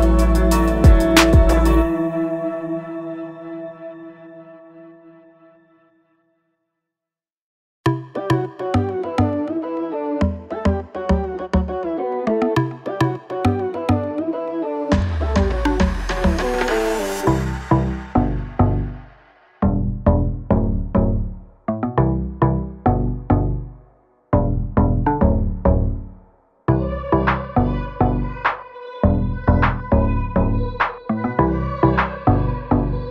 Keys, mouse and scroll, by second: 2.6 Escape, 2.9 click, 8.7 click, 10.1 ctrl+click, 10.8 ctrl+click, 13.2 click, 20.1 ctrl+z, 21.3 click, 22.7 Escape, 23.8 ctrl+click, 24.6 ctrl+click, 26.6 click, 29.5 click.